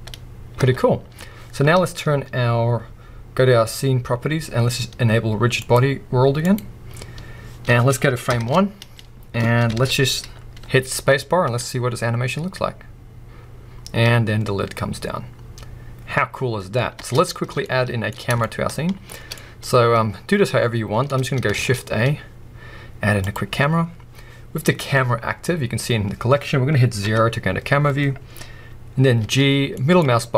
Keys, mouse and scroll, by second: 0.6 space, 5.6 click, 6.5-8.3 drag, 8.3 shift+Left, 9.1 scroll down 1, 9.7 alt+a, 10.7-11.4 scroll up 1, 11.4 space, 17.0 space, 17.6-30.3 middle drag, 18.1-18.4 scroll up 2, 21.5 shift+a, 27.0 KP_0, 29.2 g.